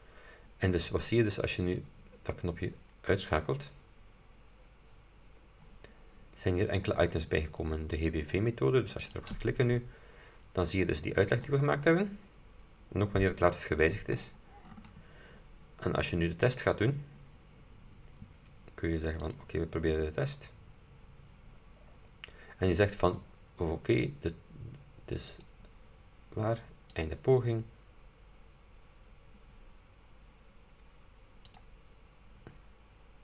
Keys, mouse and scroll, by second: 1.0 scroll up 2, 3.4 click, 6.0-6.8 scroll down 4, 9.1 click, 16.6 click, 19.4 click, 25.4 click, 27.0 click, 31.6 click.